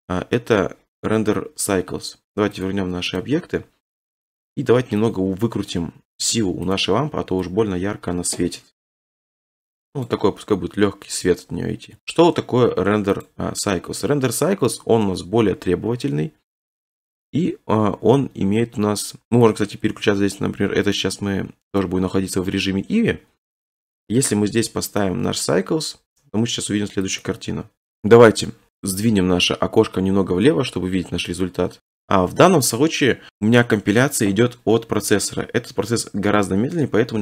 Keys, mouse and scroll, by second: 2.7 click, 3.2 click, 5.1 click, 6.7 click, 10.1 click, 13.3 click, 16.6 middle click, 16.6-17.9 scroll, 17.9-18.7 scroll, 19.4 click, 21.8 click, 25.0 click, 27.2 click, 31.8-33.3 right drag.